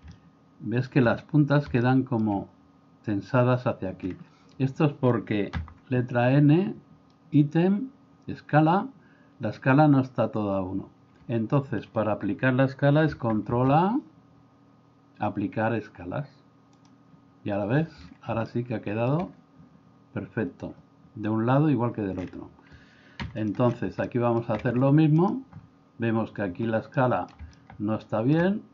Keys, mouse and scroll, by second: 0.1-0.9 shift+middle drag, 1.8-2.2 shift+middle drag, 5.6 n, 13.5 ctrl+a, 18.5-19.1 shift+middle drag, 23.3 x, 24.1 middle click, 27.0-27.4 middle drag, 27.6-28.4 middle drag.